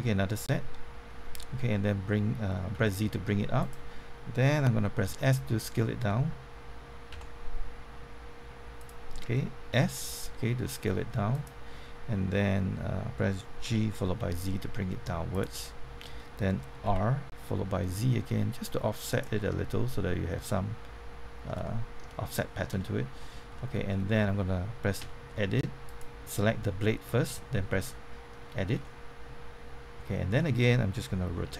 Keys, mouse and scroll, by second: 2.7 z, 3.6 click, 5.0 z, 8.8 click, 9.7 typing, 11.3 click, 13.6-14.7 typing, 15.3 click, 15.5 middle click, 16.8-17.6 typing, 19.0 click, 19.4-22.8 middle drag, 23.2 scroll up 1, 23.5 middle click, 25.0 Tab, 25.2 middle click, 25.8 click, 27.2 Tab, 27.6-30.4 middle drag, 31.3 r.